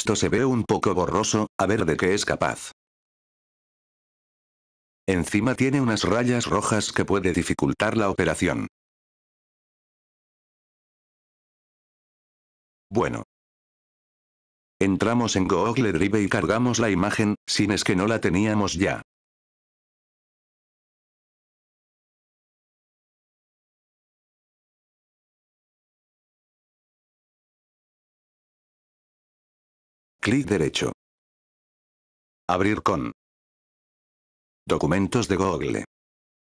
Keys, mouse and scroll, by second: 0.1 scroll up 2, 0.9 scroll up 1, 0.9-2.0 scroll down 3, 2.3 scroll up 4, 3.1 scroll up 1, 3.5 scroll down 4, 4.5 F4, 4.9 click, 12.4 F4, 12.8 click, 16.2 ctrl+Num_Lock, 17.1 click, 20.7 drag, 23.1 click, 23.5 click, 27.1 F4, 30.0 click, 31.1 right click, 36.0 click.